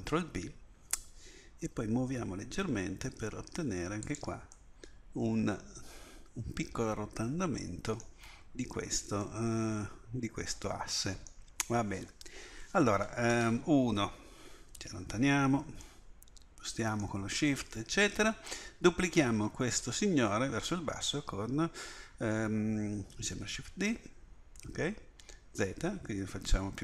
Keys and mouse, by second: 5.0 middle click, 5.2 middle click, 10.2 middle click, 10.6 click, 13.4 KP_1, 16.2 middle click, 23.8 shift+d.